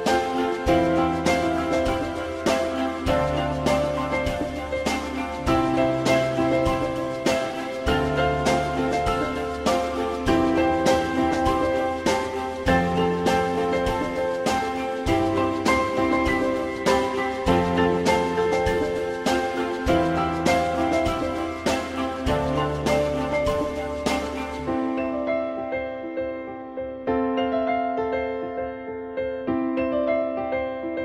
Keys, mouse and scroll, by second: 29.6 alt+middle click.